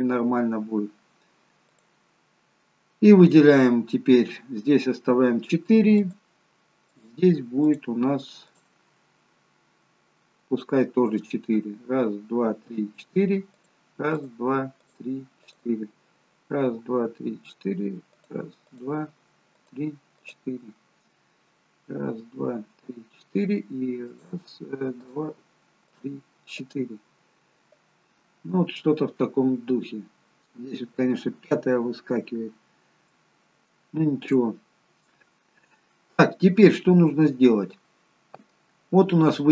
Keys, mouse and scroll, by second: 1.7 click, 6.1 shift+click, 13.6-20.6 shift+click, 24.1 shift+click, 34.2-35.2 scroll down 2, 36.9-38.8 scroll down 1.